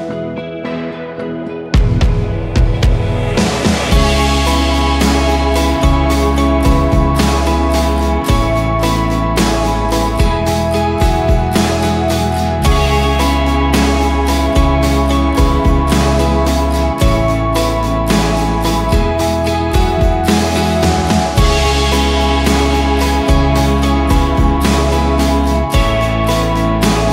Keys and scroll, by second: 0.8 Escape, 1.6 ctrl+r, 2.4 ctrl+r, 3.6 Escape, 4.6 ctrl+r, 7.8 ctrl+r, 8.6 ctrl+r, 9.4 ctrl+r, 10.4 ctrl+r, 10.8 Escape, 11.0 F4, 13.8 F2, 22.8 1, 23.0 2, 23.2 Return, 25.6 ctrl+Page_Down.